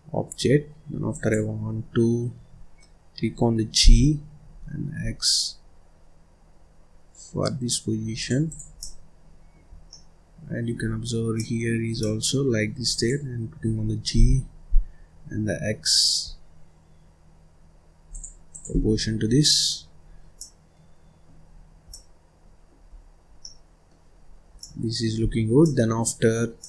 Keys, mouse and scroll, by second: 0.4-1.1 scroll up 1, 1.1 click, 2.9-3.3 scroll up 2, 3.8 g, 8.4 click, 8.7 middle click, 9.7 scroll down 1, 9.8-11.0 middle drag, 11.0-11.3 scroll up 1, 11.3-12.8 middle drag, 12.8 click, 14.1 g, 18.4 click, 18.8-19.4 scroll down 4, 19.4 middle click, 19.9-20.3 scroll up 1, 20.3-21.4 middle drag, 21.4-21.8 scroll up 4, 21.8-22.8 middle drag, 22.8-23.3 scroll down 4, 23.3 middle click, 24.1-24.5 scroll up 1, 24.5 middle click, 25.1-25.5 scroll down 1, 25.5 middle click, 26.1-26.5 scroll up 2, 26.5 middle click.